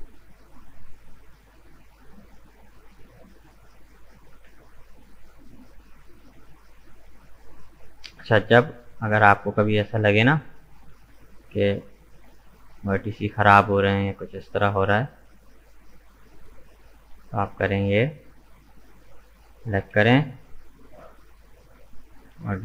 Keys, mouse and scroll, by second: 0.4 Tab, 0.5 right click, 0.9-2.3 middle drag, 2.3-2.6 scroll down 1, 2.6-4.2 middle drag, 4.2 right click, 4.5 Tab, 4.8-5.1 scroll up 2, 5.1-6.9 middle drag, 6.9-7.3 scroll up 1, 7.3-11.6 middle drag, 11.9 alt+right click, 12.5-15.5 middle drag, 16.0 shift+right click, 16.4-19.6 middle drag, 19.8 Delete, 22.4-22.6 middle drag.